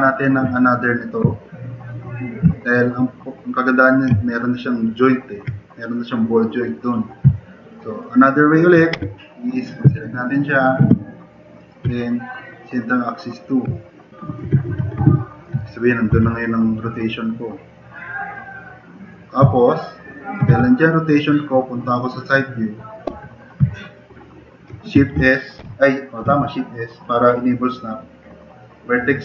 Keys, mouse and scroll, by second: 9.0 1, 9.9-10.5 drag, 13.7 drag, 14.7 4, 15.1 click, 16.2 r, 17.7-19.0 drag, 20.0 click, 20.4 e, 23.1 s, 25.6 s.